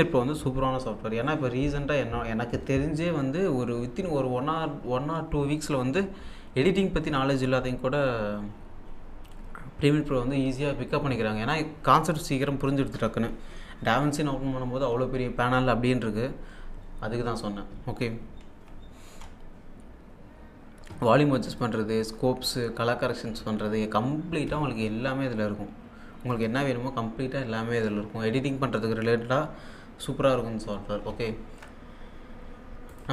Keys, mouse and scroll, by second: 21.5 click, 26.3 click, 31.1 alt+Tab, 32.9 click.